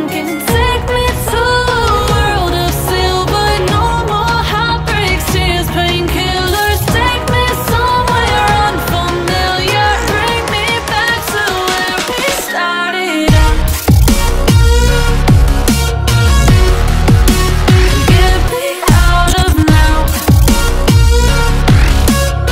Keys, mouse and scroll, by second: 0.8 click, 1.3-1.8 scroll down 3, 1.8 p, 2.8-3.2 scroll down 4, 3.2 click, 4.0 click, 5.8 Tab, 6.5 click, 8.0-9.8 right drag, 9.8 click, 10.2 click, 10.6-12.9 right drag, 12.9 click, 13.2-14.8 right drag, 14.8 click, 16.8-18.2 drag, 18.5-19.4 scroll down 4, 19.4-22.5 drag.